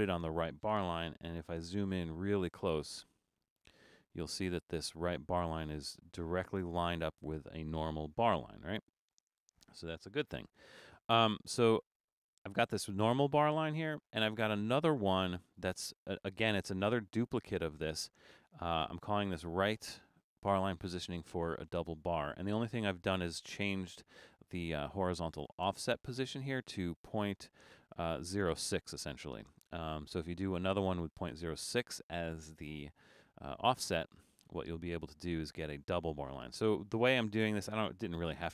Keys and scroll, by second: 1.1 super+=, 1.4 super+=, 1.8 super+=, 9.2 BackSpace.